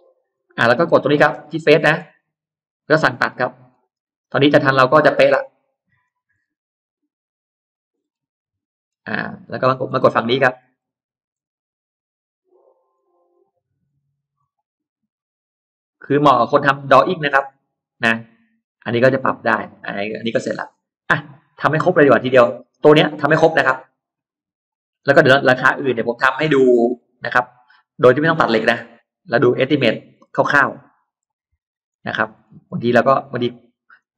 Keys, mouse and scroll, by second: 0.1 click, 0.5 middle click, 0.5 scroll up 1, 1.1 scroll down 2, 1.5 scroll up 2, 2.3 click, 3.1 click, 3.5-3.8 scroll down 1, 4.1 scroll down 2, 4.7 middle click, 5.1 scroll down 2, 5.9 click, 6.1-6.6 scroll down 2, 6.6-7.5 scroll up 2, 7.5 click, 7.9 scroll up 1, 8.7-9.9 scroll up 2, 8.9 middle click, 9.7 middle click, 10.0 scroll down 1, 10.3-11.1 scroll up 1, 10.9 middle click, 11.8 click, 12.8 click, 13.1-13.5 scroll up 2, 14.2 click, 14.8 scroll up 2, 15.4 click, 15.8 middle click, 15.8-16.1 scroll down 2, 16.3 scroll up 2, 16.8 click, 17.1 scroll down 2, 17.5-17.9 scroll up 2, 18.5 click, 19.0-20.8 scroll down 6, 20.8-21.9 scroll up 4, 21.9 middle click, 22.5 scroll down 1, 22.9 middle click, 23.2 scroll down 1, 23.7-24.3 scroll up 2, 24.8 click, 25.9 click, 27.1 click, 27.9 middle click, 27.9-28.3 scroll up 1, 28.6 scroll down 1, 28.8 middle click, 29.5 click, 30.0-31.0 scroll down 4, 31.0 scroll up 2, 31.9-32.3 scroll down 2, 32.5-33.5 scroll up 3, 33.8 click.